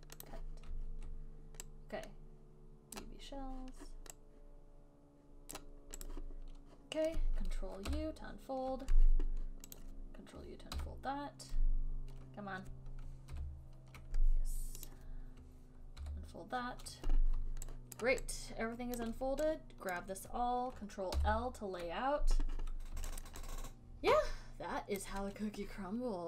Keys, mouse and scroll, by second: 0.6 click, 3.3 right click, 5.8 right click, 6.4 click, 8.2 ctrl+u, 10.1 click, 11.1 ctrl+u, 13.6 ctrl+u, 15.2 click, 16.4 ctrl+u, 18.3 alt+right click, 19.3 alt+right click, 20.3 click, 20.3 alt+middle click, 23.6 alt+right click, 24.6 ctrl+i, 25.3 alt+right click.